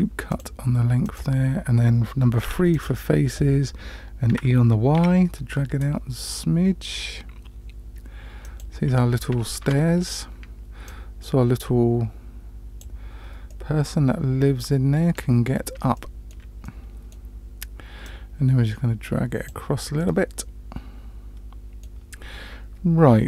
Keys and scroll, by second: 2.4 3, 4.3 e, 9.6 Tab.